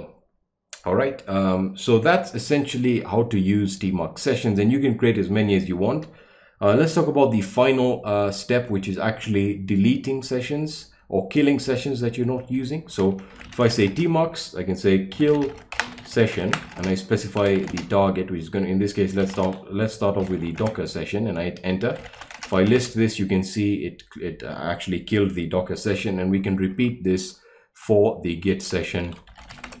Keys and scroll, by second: 13.1-23.2 typing, 26.0 Up, 26.7 Up, 27.8-29.8 typing.